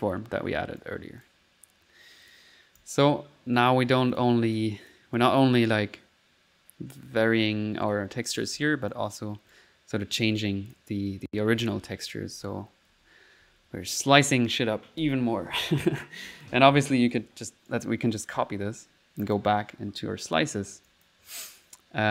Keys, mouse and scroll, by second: 2.3-3.3 drag, 4.2 click, 4.6 click, 8.6 alt+1, 9.0 click, 9.6 right click, 9.7-15.0 typing, 10.4 click, 11.1 click, 16.3 click, 17.1 right click, 18.2 ctrl+right click, 18.3 ctrl+c, 18.5-20.5 ctrl+middle drag, 20.9 click, 21.7 right click.